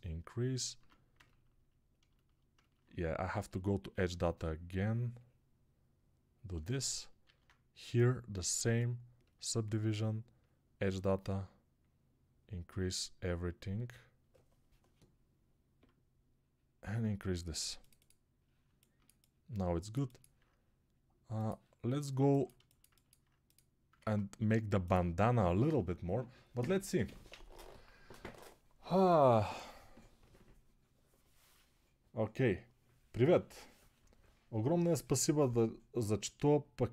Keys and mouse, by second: 0.6 Tab, 3.7-6.5 middle drag, 6.5-22.1 alt+shift+drag, 7.1 alt+q, 22.1-36.9 ctrl+alt+middle drag, 23.8 ctrl+Tab.